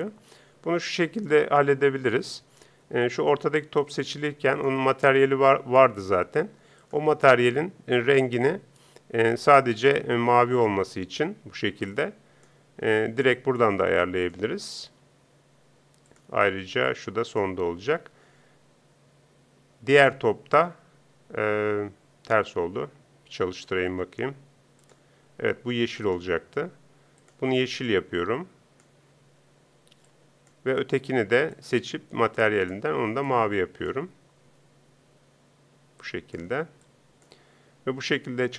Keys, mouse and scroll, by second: 3.0-6.8 drag, 25.4 p, 32.0 click.